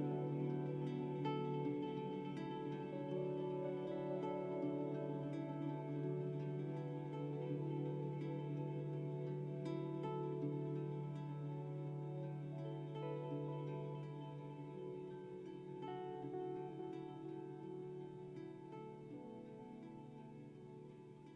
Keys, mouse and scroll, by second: 0.4-1.1 typing, 0.6-9.0 drag, 18.4-19.1 typing, 18.6 click.